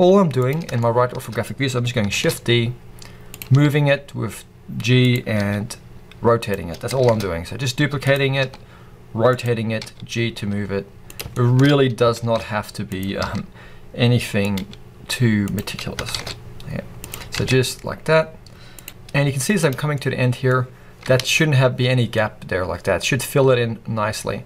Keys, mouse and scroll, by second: 0.4 click, 0.7-3.3 shift+middle drag, 2.0 shift+d, 3.3 click, 3.4 r, 5.0 click, 5.3 g, 6.4 click, 6.6 scroll down 1, 6.9 shift+d, 8.0 click, 8.3 r, 9.3 click, 9.7 g, 11.0 click, 11.2-12.9 shift+middle drag, 11.6-12.1 scroll up 2, 12.1 shift+d, 12.9 click, 13.1 r, 14.4 click, 15.3 g, 15.4 click, 15.7-16.0 scroll down 2, 16.0 shift+d, 17.0 click, 17.3 r, 18.8 g, 18.9 scroll down 2, 19.0 z, 19.9-21.1 middle drag, 21.1 alt+a, 21.7 scroll down 2, 21.9-24.4 middle drag.